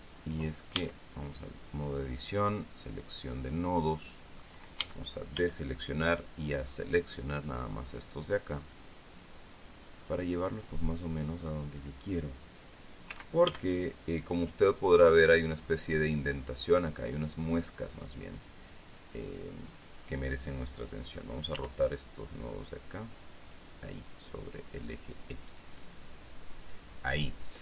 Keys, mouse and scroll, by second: 1.3 Tab, 3.0 click, 5.4 a, 6.7-8.2 drag, 8.9-10.8 drag, 13.7 a, 15.2-16.5 drag, 22.1 r, 24.0 click.